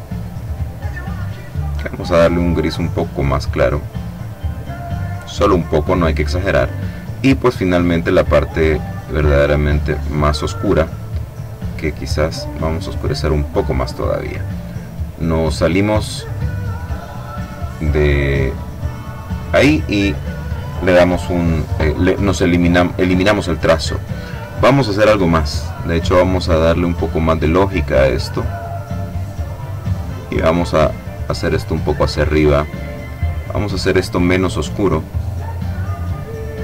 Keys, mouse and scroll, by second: 1.6-6.6 drag, 7.7-10.7 drag, 11.8-13.6 drag, 16.2 click, 18.0 click, 18.8 click, 25.2 click, 27.3-32.2 drag, 33.2 click, 35.4-36.6 drag.